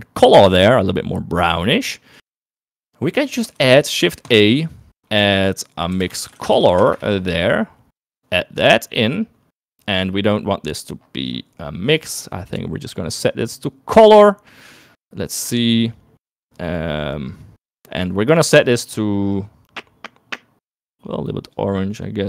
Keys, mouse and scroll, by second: 2.9 click, 3.0 middle click, 3.3 middle click, 3.8 middle click, 4.3 shift+a, 9.5 click, 12.7-14.6 drag, 16.8-17.9 middle drag, 18.9 click.